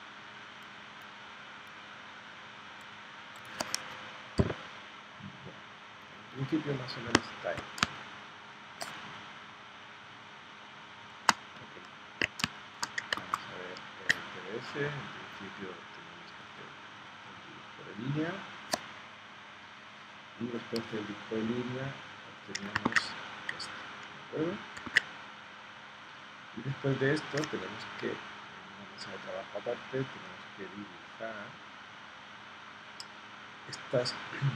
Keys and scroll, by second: 7.8 space, 12.4 space, 13.2 super+Tab, 22.9 super+Tab, 24.9 super+Tab.